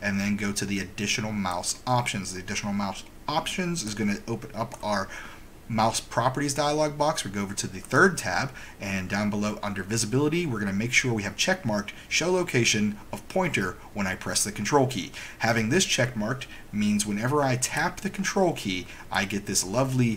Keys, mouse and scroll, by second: 1.7 click, 4.8 click, 8.0 click.